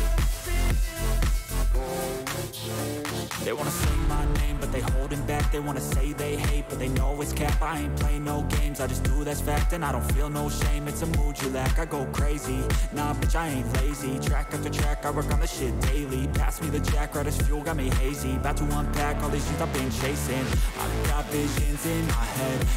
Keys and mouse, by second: 0.0 click, 0.8 click, 2.8-4.2 drag, 5.2 click, 6.5 click, 7.1 click, 7.4 click, 7.6 click, 10.1 click, 11.5 click, 13.3-14.5 drag, 15.0 click, 15.6 click, 17.6 click, 19.2 click, 21.4-22.7 drag.